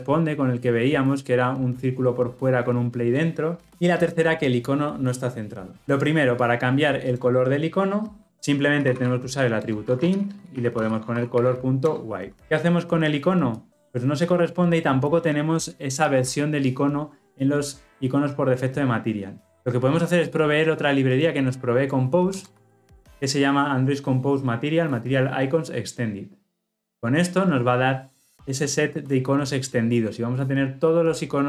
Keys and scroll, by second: 8.2 Return, 22.5 ctrl+v.